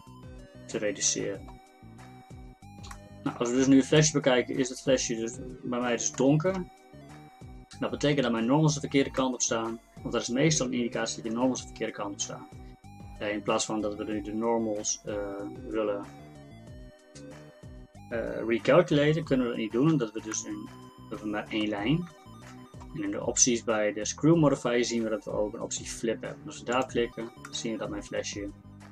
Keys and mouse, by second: 11.3-20.0 middle drag, 20.0 Tab, 22.1 Tab, 26.8 click, 27.5-28.9 middle drag.